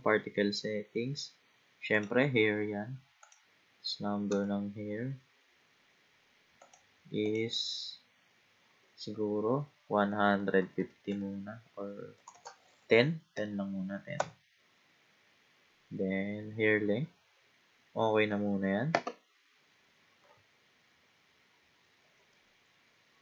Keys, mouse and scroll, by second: 2.0 click, 3.2-6.3 drag, 7.2-10.3 drag, 12.3 BackSpace, 14.9-15.6 scroll down 2, 15.8-16.9 scroll down 3, 18.0 scroll down 2.